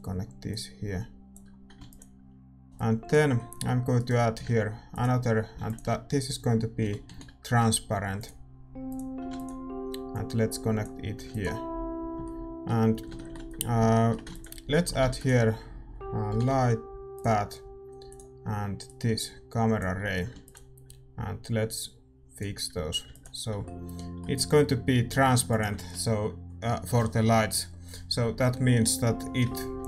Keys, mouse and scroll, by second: 25.8 ctrl+s, 25.8-29.8 drag.